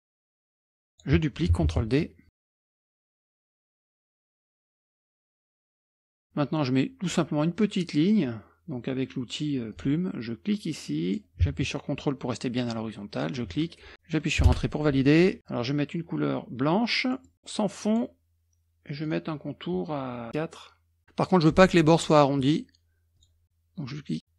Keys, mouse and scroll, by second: 0.1 click, 0.6-1.5 ctrl+drag, 1.7 ctrl+d, 2.3-3.5 typing, 2.3 ctrl+click, 3.5 F1, 3.7 ctrl+click, 4.1 ctrl+scroll up 3, 4.5 click, 4.7 click, 5.0 click, 5.3 ctrl+click, 5.7 ctrl+click, 5.9 F1, 6.1 scroll up 2, 9.7 click, 11.1 click, 13.1 ctrl+click, 14.5 Return, 17.1 scroll down 1, 17.8 click, 20.2 click, 22.4 click, 23.2 click.